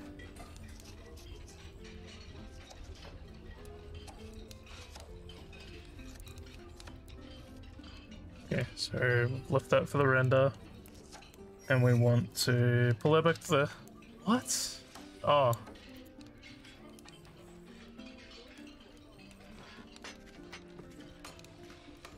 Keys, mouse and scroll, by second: 6.2 click, 12.3-15.5 drag, 16.0 click, 18.5 click.